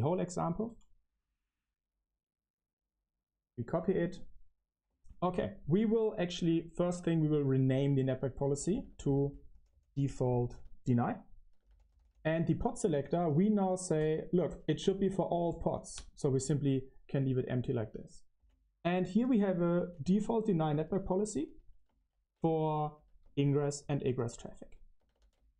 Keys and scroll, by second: 0.0 k, 0.5 k, 4.9 shift+a, 6.8-16.5 typing, 9.1 Escape, 18.3-21.9 typing, 18.8 Escape, 23.5-25.0 typing.